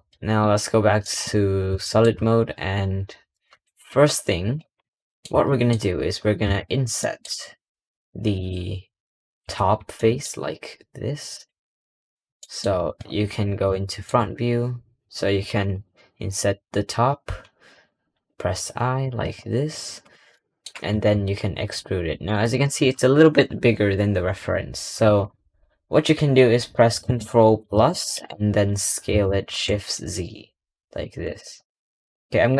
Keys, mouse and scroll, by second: 0.0-1.2 middle drag, 1.2-1.7 scroll up 3, 1.7 shift+middle click, 2.0 scroll down 2, 3.4 click, 3.8 scroll up 2, 4.0 scroll down 1, 4.2-4.6 scroll up 2, 4.6 7, 5.5 middle click, 5.6-6.3 scroll down 6, 6.3 Tab, 6.9 shift+middle click, 7.4 3, 8.2 click, 9.3 scroll up 2, 9.8 shift+middle click, 10.3 scroll down 1, 11.2 click, 11.8 scroll up 2, 12.3 shift+middle click, 12.7 scroll up 1, 13.7 middle click, 19.2 scroll, 19.3-20.2 scroll up 3, 20.2 shift+middle click, 20.8 e, 22.8-23.2 scroll down 1.